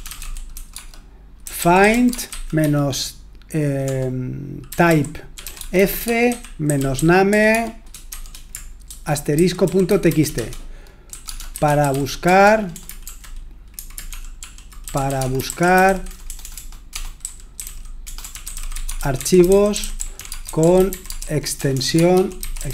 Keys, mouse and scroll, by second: 0.0-22.7 typing.